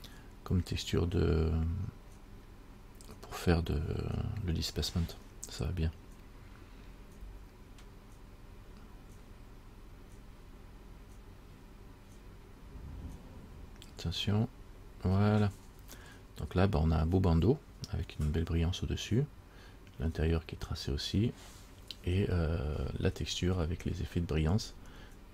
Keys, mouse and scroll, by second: 23.2-24.0 scroll up 6, 24.5-25.3 scroll up 2.